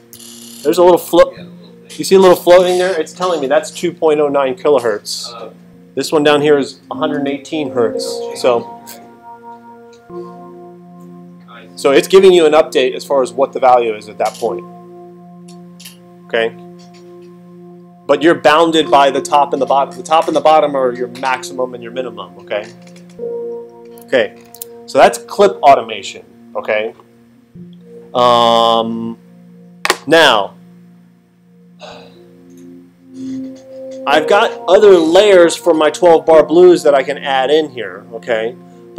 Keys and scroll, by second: 0.1 alt+super+8, 24.4 alt+super+8.